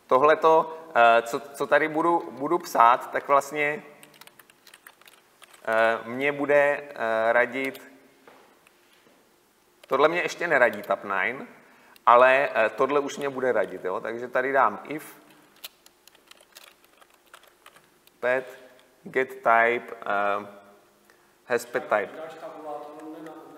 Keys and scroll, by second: 3.3 Tab, 4.9 Delete, 7.6 Delete, 8.8 Return.